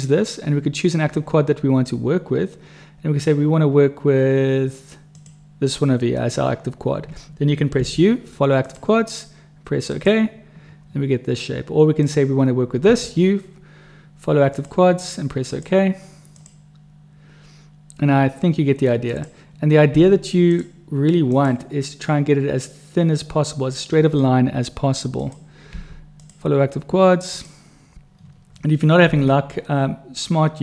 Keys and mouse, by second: 5.0 click, 7.8 u, 12.9 u, 19.1 click, 19.9 u, 25.1 click, 25.7 u, 29.1 u.